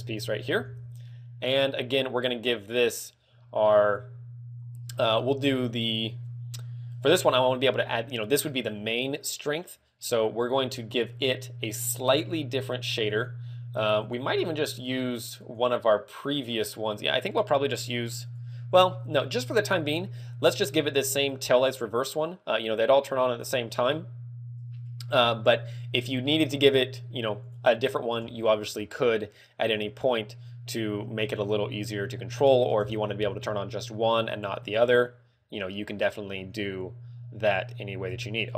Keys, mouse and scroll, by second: 0.0 shift+middle click, 0.5-0.9 scroll up 3, 1.0 middle click, 1.2 scroll up 1, 18.1 click, 20.4 click, 21.5 click, 26.3 click, 27.4 click, 28.2 Tab, 30.0 middle click, 32.1 ctrl+click, 33.9 middle click, 34.7 scroll up 2, 37.4 scroll down 1.